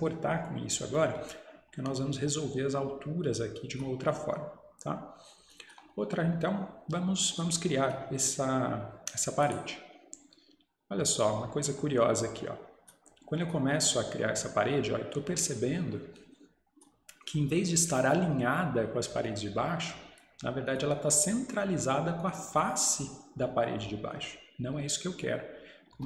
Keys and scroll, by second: 25.9 Escape.